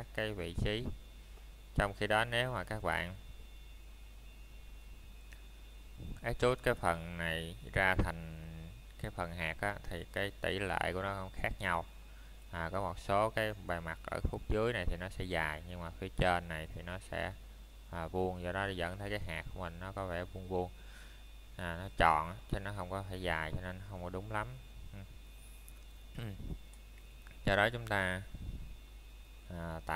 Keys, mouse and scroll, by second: 0.3 middle click, 2.9 click, 3.3 middle click, 3.7 scroll up 1, 5.6 middle click, 6.6 scroll down 1, 7.0 middle click, 7.4 scroll up 1, 8.6 middle click, 9.5 scroll up 1, 10.9 middle click, 12.4-12.8 scroll down 1, 12.8 middle click, 15.1 scroll down 1, 16.3 middle click, 16.6 scroll down 1, 17.1 middle click, 17.5 scroll up 1, 18.6 middle click, 19.3 scroll down 1, 20.0 middle click, 21.4 scroll down 1, 22.0 middle click, 22.9 Tab, 25.5 click, 26.1 middle click, 26.7 scroll down 1, 27.2 middle click, 28.3 scroll up 1, 28.9 middle click.